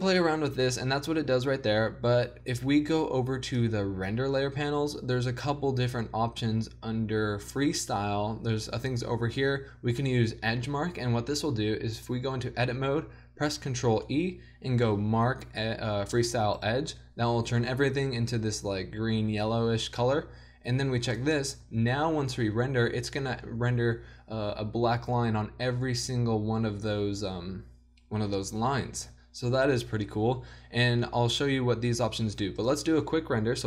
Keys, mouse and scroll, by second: 2.3-3.5 middle drag, 3.5-11.3 drag, 11.7 Tab, 13.9 ctrl+e, 18.0 middle click, 21.2 middle click, 21.7 Tab, 23.5 Tab, 29.6 Tab.